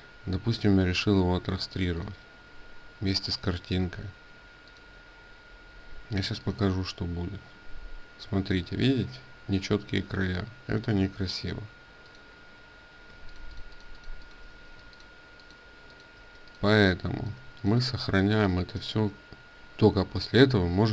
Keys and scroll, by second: 10.7 ctrl+z, 12.9 ctrl+space, 15.2 ctrl+alt+space, 18.3 ctrl+shift+s.